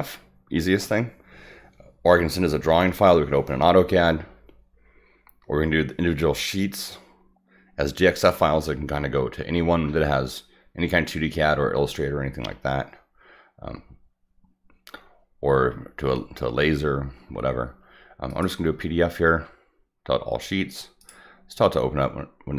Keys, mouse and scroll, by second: 18.3 click, 21.0 click.